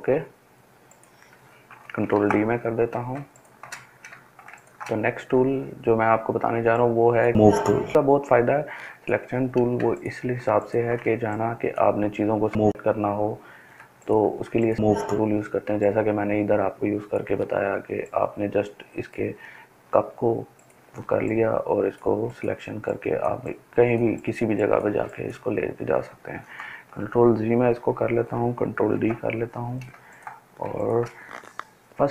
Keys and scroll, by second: 2.1 ctrl+d, 3.1 ctrl+space, 27.6 ctrl+z, 29.0 ctrl+d, 29.9 ctrl+space.